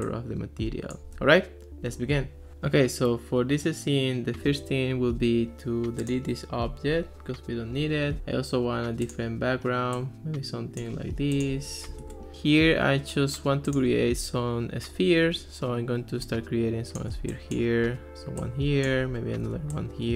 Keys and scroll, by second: 6.9 BackSpace, 12.0 super+v.